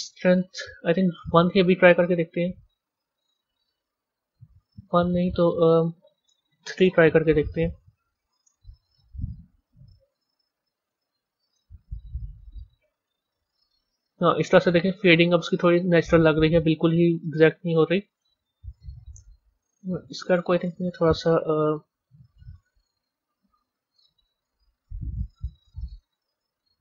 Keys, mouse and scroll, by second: 0.2 click, 2.0 click, 5.6-13.7 drag, 14.0 drag, 15.7-17.3 drag, 17.3-18.7 middle drag, 18.7 click, 19.7 b, 21.4 KP_3, 26.6 Tab.